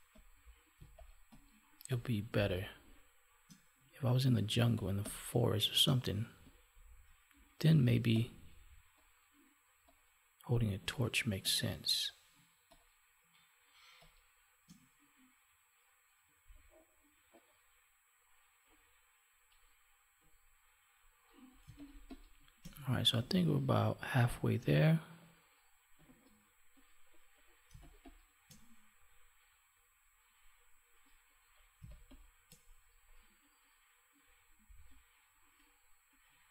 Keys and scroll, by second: 7.8 space, 21.6 space, 27.6 space, 31.8 space.